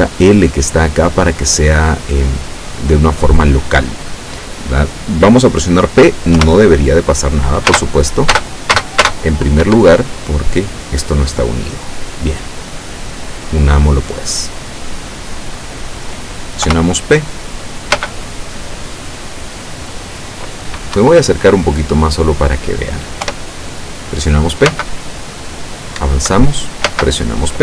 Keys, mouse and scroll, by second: 0.7 click, 6.4 p, 7.8 space, 8.4 space, 12.7-13.8 drag, 14.6-15.8 drag, 16.7 p, 18.1 space, 21.0 Escape, 21.9-22.6 scroll up 2, 23.3 p, 24.8 space, 26.1 Up, 27.0 space.